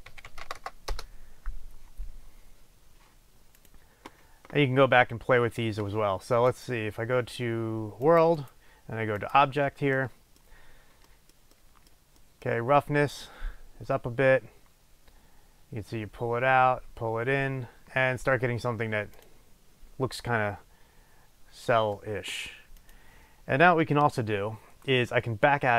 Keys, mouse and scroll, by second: 0.6 KP_0, 1.1 Return, 6.6-8.2 drag, 8.3-10.1 drag, 10.1 middle click, 10.6-11.1 scroll up 1, 11.1 middle click, 13.1-17.8 drag, 19.3 click, 22.8 click, 24.3-24.8 scroll down 1, 24.8 scroll up 1.